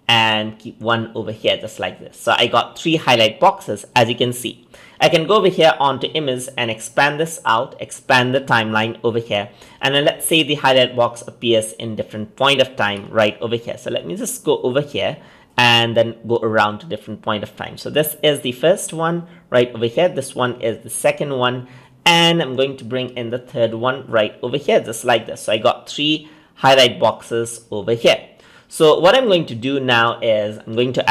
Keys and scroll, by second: 13.0 ctrl+z.